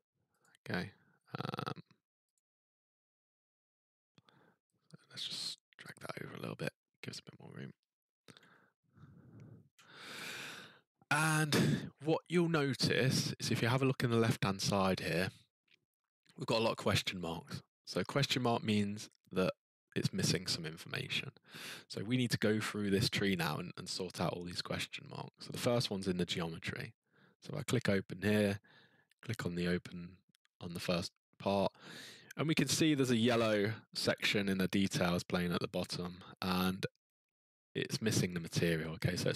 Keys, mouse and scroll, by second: 0.4 click, 2.3 click, 5.8 click, 9.6-11.3 ctrl+scroll, 27.5 click, 29.2 click.